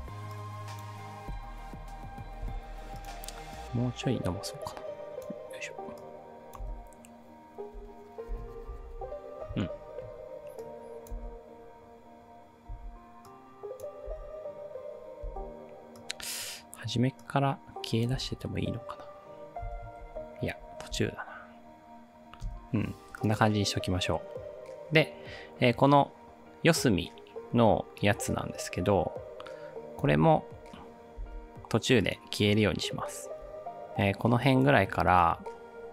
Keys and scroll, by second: 1.3 space, 6.7 space, 8.4 space, 11.2 space, 12.7 space, 14.2 space, 15.2 space, 18.2 space, 19.7 space, 20.0 ctrl+z, 21.0 space, 22.5 space, 30.1 space, 31.2 space, 33.3 space.